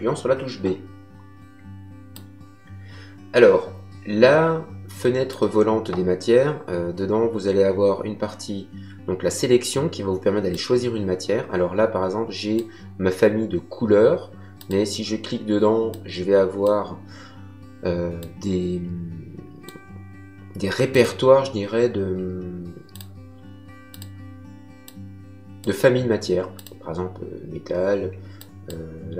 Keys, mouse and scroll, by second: 2.1 click, 10.5 click, 14.5 click, 18.1 click, 20.9 click, 22.9 click, 26.5 click, 28.3 click.